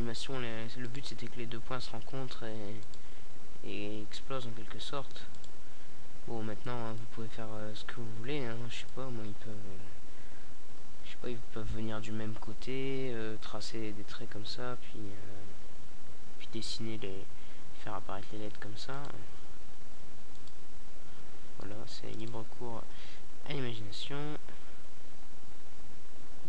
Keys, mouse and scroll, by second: 0.8-1.8 drag, 1.8 Tab, 3.1 Tab, 3.9-5.4 middle drag, 5.6 middle click, 12.0 g, 14.6 click, 14.6 r, 15.4 click, 16.3 e, 18.1 r, 24.1 Tab.